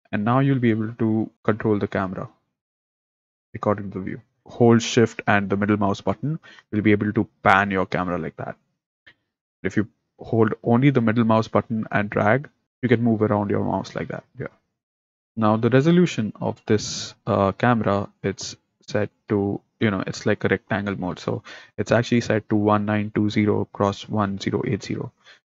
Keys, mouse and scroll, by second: 0.0 click, 0.7-1.1 scroll down 3, 1.3-1.9 scroll up 3, 1.9-2.4 scroll down 3, 2.4-2.7 scroll up 2, 2.7-3.1 scroll down 3, 3.1-4.2 scroll up 3, 4.2 scroll up 1, 4.4-12.7 shift+middle drag, 15.1-25.5 shift+middle drag.